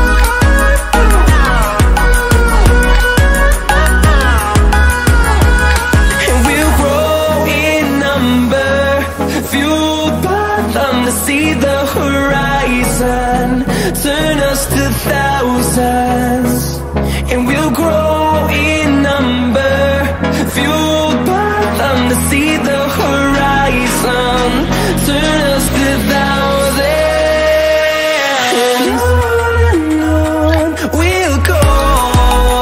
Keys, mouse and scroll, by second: 0.0-0.7 scroll down 1, 0.8 click, 3.6 Return, 5.5 right click, 6.3 click, 7.8 alt+scroll up 1, 8.6-9.1 scroll up 1, 9.2 alt+scroll up 1, 9.9 scroll up 1, 10.5-10.8 scroll down 1, 11.6 scroll up 1, 11.8 alt+scroll down 1, 21.0 click, 21.7-22.2 typing, 22.9-25.3 drag, 25.3-27.9 drag, 28.6 typing, 29.3-32.6 drag.